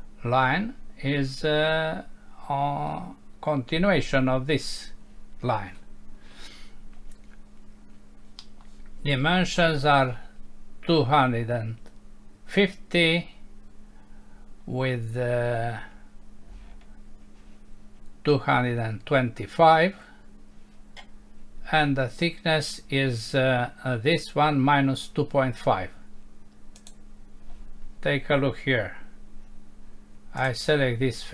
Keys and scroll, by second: 8.4 Home.